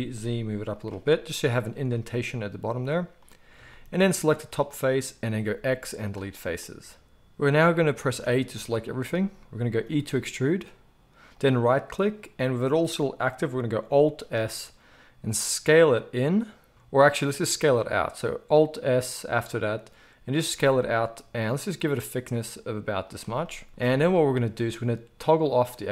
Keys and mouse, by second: 4.3 click, 5.4 x, 6.8 ctrl+z, 6.8 alt+a, 7.4 middle click, 8.1 a, 9.8 e, 14.2 alt+s, 20.5-25.5 shift+middle drag, 23.7 z, 25.5-25.9 drag.